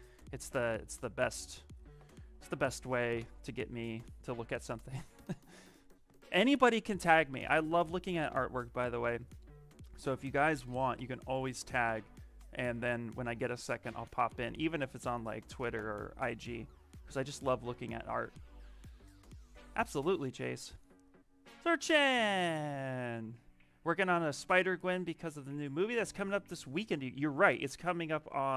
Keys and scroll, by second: 4.5 ctrl+v.